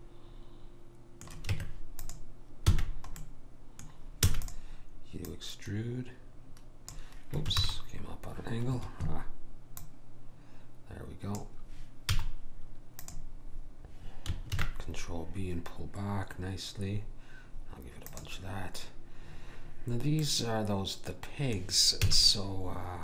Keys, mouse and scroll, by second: 1.5 Tab, 2.7 f, 3.2-5.1 middle drag, 4.2 e, 5.3 click, 9.8 click, 12.1 z, 13.5-14.6 middle drag, 14.6 ctrl+b, 20.3-22.1 middle drag, 22.1 a.